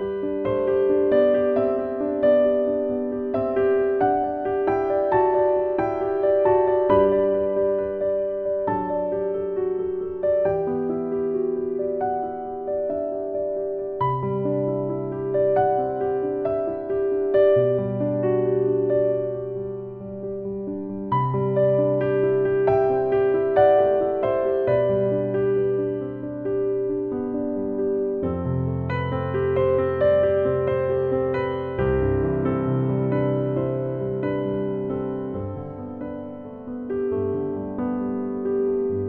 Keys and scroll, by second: 29.8 BackSpace, 31.1 KP_1, 32.1 KP_4, 32.2 KP_1, 34.5 KP_Decimal.